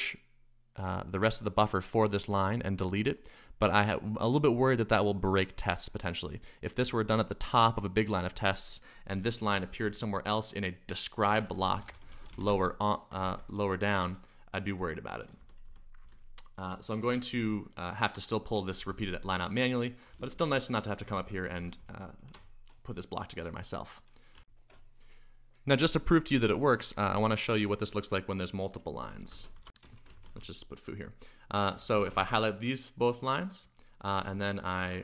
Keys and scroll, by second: 9.2-17.1 typing, 18.4-22.3 typing, 24.3 u, 24.4 shift+super+1, 28.5-32.4 typing, 34.8-35.0 typing.